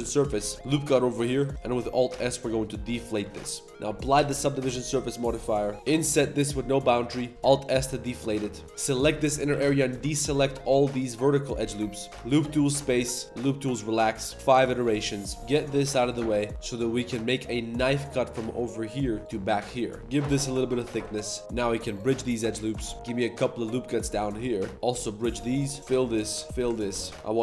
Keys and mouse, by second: 0.1 click, 0.4 click, 0.4 z, 0.5 Tab, 0.5 ctrl+r, 0.9 drag, 1.2 1, 1.3 alt+click, 1.5 alt+s, 1.5 g, 1.9 alt+s, 3.2 Tab, 3.4 drag, 4.1 ctrl+a, 4.7 Tab, 5.2 drag, 5.7 z, 5.7 i, 7.0 3, 7.1 click, 7.3 alt+s, 8.6 shift+3, 8.9 z, 9.2 z, 9.2 click, 9.5 2, 10.3 alt+shift+click, 10.6 alt+shift+click, 10.9 alt+shift+click, 11.2 alt+shift+click, 11.6 alt+shift+click, 11.9 alt+shift+click, 12.1 ctrl+z, 12.1 w, 12.9 w, 14.8 Tab, 14.9-15.4 drag, 15.4-17.0 typing, 20.0-21.4 typing, 21.4 Tab, 22.4 click, 22.7 Tab, 22.8 click, 22.9 ctrl+r, 22.9 ctrl+b, 24.3 ctrl+r, 24.7 2, 24.7 w, 25.9 ctrl+z, 25.9 f, 26.0 click, 26.4 alt+click, 26.5 f, 26.9 z, 27.0 click, 27.1 ctrl+r.